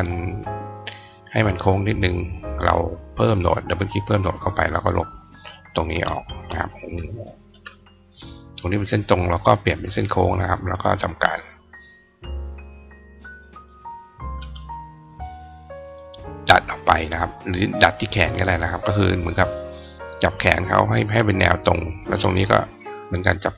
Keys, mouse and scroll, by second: 3.3 click, 3.6 click, 4.3-5.1 drag, 8.2 click, 9.6 click, 10.2 click, 13.0 click, 13.7 click, 15.0 click, 17.1 click, 19.9-21.4 drag, 21.9 click, 23.0-23.5 drag.